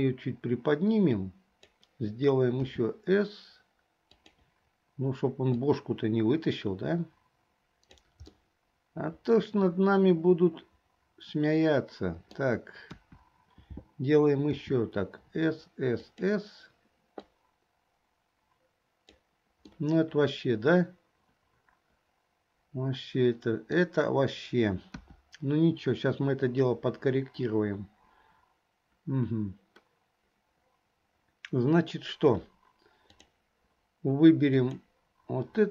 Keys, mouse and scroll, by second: 0.1-1.9 drag, 2.7 s, 5.6-8.1 drag, 8.5-12.5 middle drag, 13.0 KP_1, 15.4 s, 17.6-19.3 drag, 19.9-23.9 middle drag, 25.0 KP_1, 33.3 click, 34.6 click.